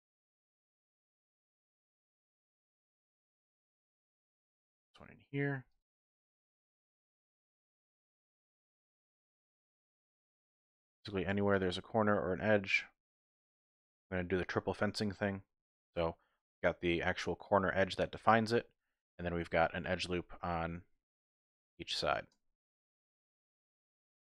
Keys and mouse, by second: 0.3 shift+click, 1.3 shift+click, 3.1 ctrl+r, 5.7 click, 6.2 ctrl+r, 7.5 click, 7.8 middle click, 8.4 ctrl+r, 10.1 click, 10.5 middle click, 11.2 ctrl+r, 13.5 click, 15.1 middle click, 18.3 alt+click, 18.6 middle click, 20.6-21.9 typing, 21.2 shift+click, 22.0 shift+click, 22.8 click, 23.2-24.3 middle drag.